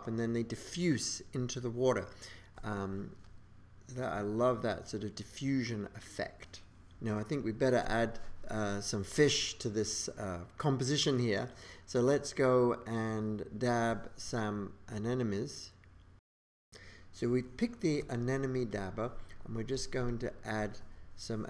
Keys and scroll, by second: 16.6 super+z.